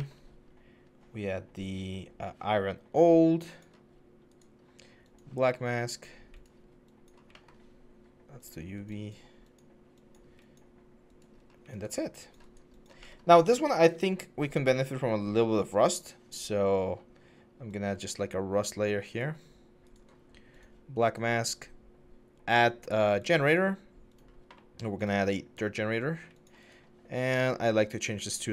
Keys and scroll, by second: 5.3 4, 11.2 1.